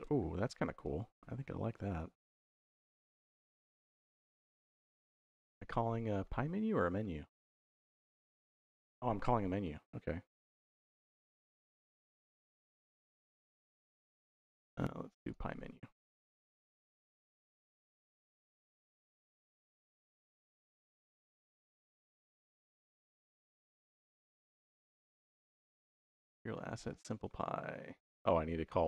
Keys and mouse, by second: 0.4 middle click, 1.0 shift+y, 5.4 middle click, 6.1 middle click, 6.9 middle click, 7.9 middle click, 10.2 shift+y, 14.1-15.2 drag, 16.3 shift+y, 17.5 click, 19.3 shift+y, 21.5 middle click, 22.0 middle click, 23.0 middle click, 26.4 middle click, 26.8 middle click, 28.6 click.